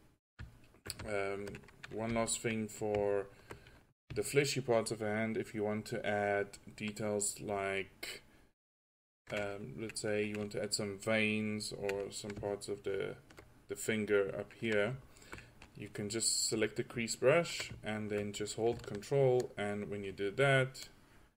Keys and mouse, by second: 0.0 drag, 2.2 f, 17.6 middle drag, 19.2-19.8 drag.